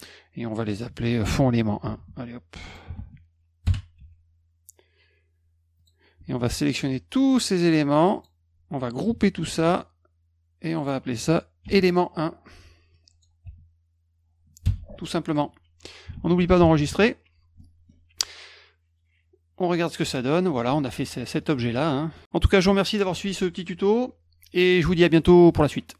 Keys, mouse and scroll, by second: 0.6 click, 0.7 click, 1.8 ctrl+c, 2.5 click, 2.7 click, 2.9 ctrl+v, 3.6 Return, 4.0 F1, 5.8 click, 6.7 click, 7.2 shift+click, 7.7 shift+click, 8.2 shift+click, 9.4 ctrl+g, 10.7 click, 10.8 click, 11.6 ctrl+v, 12.9 click, 13.4 BackSpace, 14.6 Return, 15.3 click, 16.1 ctrl+s, 17.6 middle click.